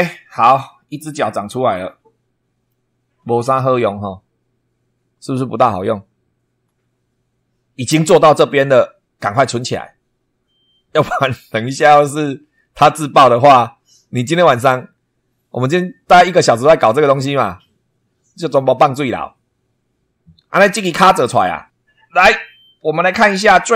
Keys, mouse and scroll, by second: 0.0 middle click, 0.8 scroll down 2, 1.4-2.8 middle drag, 13.0 click.